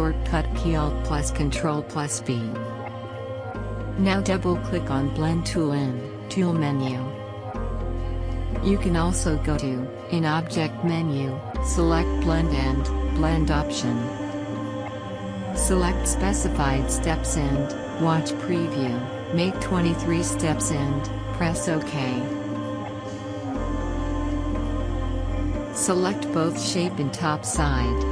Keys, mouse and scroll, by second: 1.4 click, 8.7-13.0 drag, 17.6 click, 23.4 typing, 24.1-28.1 drag.